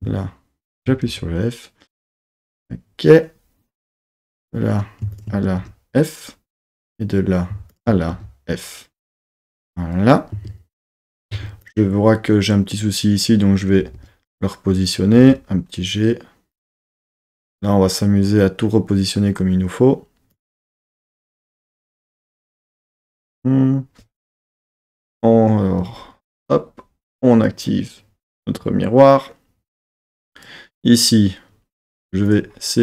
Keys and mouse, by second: 0.7 shift+click, 1.1 f, 4.0 click, 5.1 shift+click, 5.6 f, 6.7 click, 7.7 shift+click, 8.1 f, 11.1 Tab, 11.3 1, 11.6 click, 13.8 g, 14.0 g, 14.9 click, 15.1 g, 16.5 click, 20.3 click, 21.0 g, 21.1 g, 22.0 click, 24.3 KP_3, 24.9 z, 27.2 click, 30.1-31.5 drag, 32.3 click.